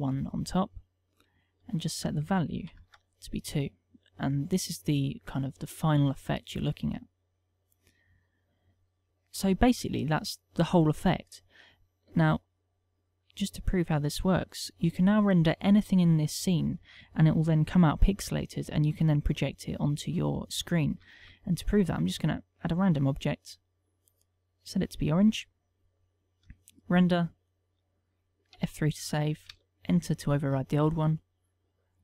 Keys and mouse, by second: 8.7 click, 13.6 click, 20.5 right click, 21.7 shift+a, 24.6 click, 27.5 F12, 31.8 click.